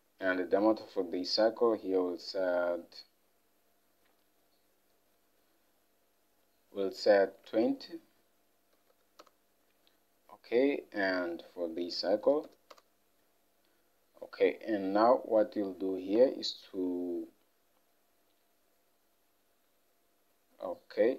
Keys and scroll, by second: 7.5 alt+Tab, 8.8 typing, 9.3 Return, 12.3 typing, 12.8 Return, 16.2 Escape.